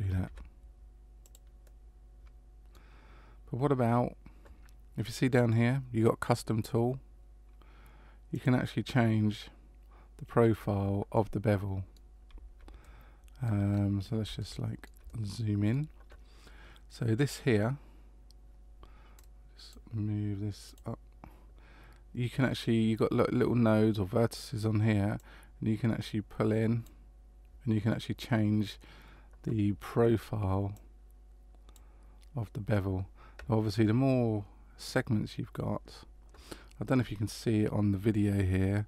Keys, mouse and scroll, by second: 0.2 ctrl+b, 1.6 middle click, 8.3 click, 11.1 middle click, 12.8 middle click, 13.7-14.2 scroll up 1, 14.2 scroll up 1, 14.4 shift+middle click, 15.1 middle click, 19.1 click, 20.6 click, 25.2 click, 30.7 click.